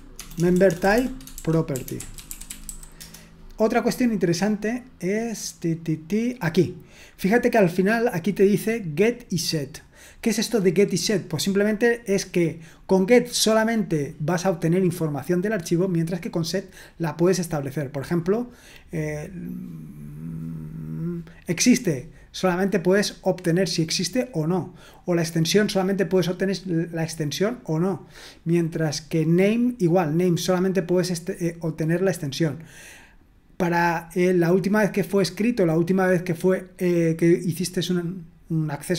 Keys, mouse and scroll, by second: 0.2-3.1 typing, 8.6-36.3 drag, 38.8-38.9 drag.